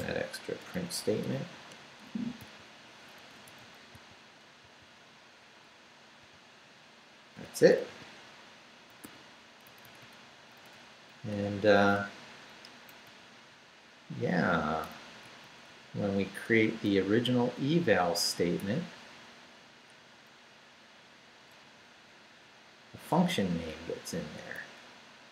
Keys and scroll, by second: 0.0-1.2 typing, 1.7 Return, 2.4 n, 3.2 Left, 3.3 Right, 3.5 Left, 3.6 Right, 3.9 n, 6.2 n, 7.9-9.5 typing, 9.6 shift+Down, 10.4 Up, 13.0 Up, 13.6 Right, 15.0 Up, 16.7 Down, 17.6 Right, 20.5 Left, 21.7 Up, 23.4 Right, 24.6 Up.